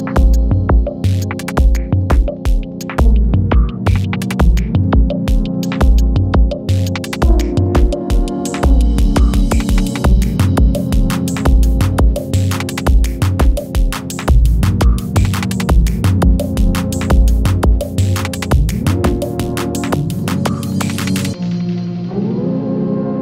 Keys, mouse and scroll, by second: 1.1 ctrl+c, 3.0 click, 4.1 shift+click, 5.1 ctrl+v, 6.7 click, 7.1 u, 7.8 u, 8.3 space, 9.4-10.1 click, 10.1 space, 12.3-12.9 click, 13.7 space, 16.2-17.8 drag, 18.4 r, 21.0-23.2 drag.